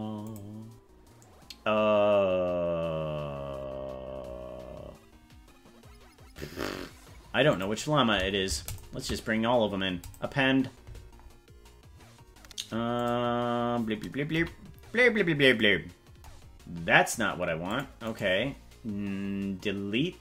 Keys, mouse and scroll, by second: 13.0 click, 14.4 KP_Decimal, 15.2-15.6 scroll down 5, 17.6 click, 18.1-20.2 right drag.